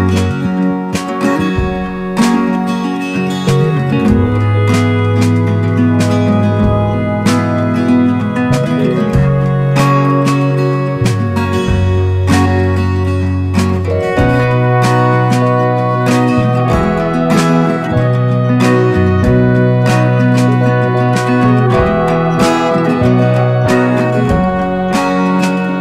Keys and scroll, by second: 12.2 ctrl+i, 19.6 [, 20.0 ], 21.4 [, 21.5 [, 21.7 [, 23.1 ], 23.2 ], 24.8-25.6 typing.